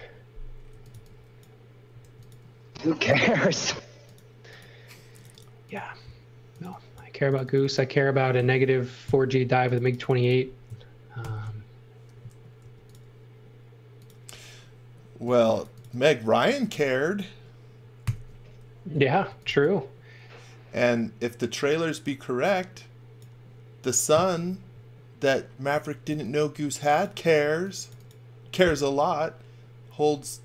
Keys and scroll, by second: 0.4-3.1 typing, 9.0 super+x, 11.2 alt+shift+v, 12.6 b, 15.2 space, 18.0-19.9 typing, 25.6 x, 26.0 v, 27.1 space.